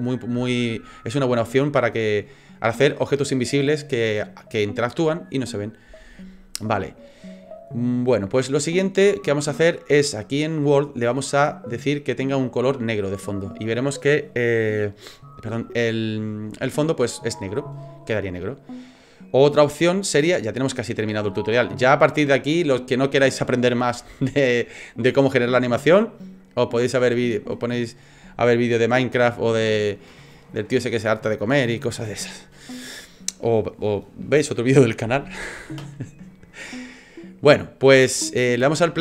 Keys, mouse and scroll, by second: 11.1 click, 12.0 click, 18.4 click, 33.3 click, 37.6 click, 38.6 space.